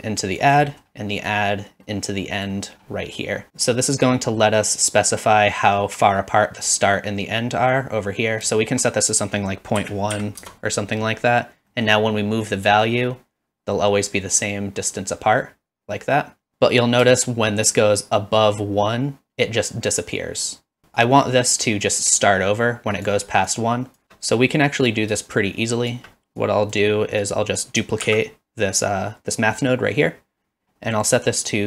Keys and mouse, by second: 0.8 middle click, 1.4-2.5 drag, 9.3-11.1 drag, 11.9 middle click, 12.8-16.5 shift+drag, 17.2-20.8 shift+drag, 21.0-23.2 shift+drag, 23.5 click, 24.5 click, 26.4 click, 27.2 click, 28.1 shift+d, 29.6 click, 31.2-31.6 drag.